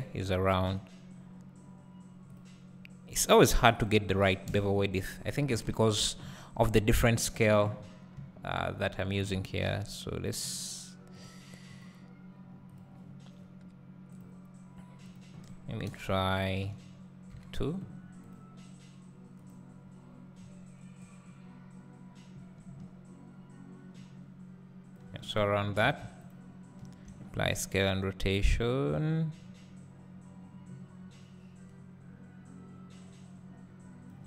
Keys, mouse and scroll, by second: 4.6-7.0 drag, 4.6 BackSpace, 7.8 scroll up 1, 10.4-19.5 drag, 25.0-34.2 drag, 25.3-25.8 scroll down 2, 25.8 ctrl+a, 26.8 `.